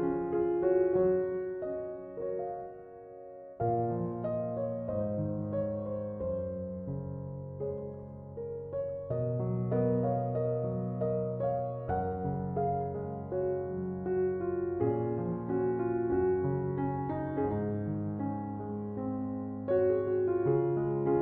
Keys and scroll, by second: 2.0 Return.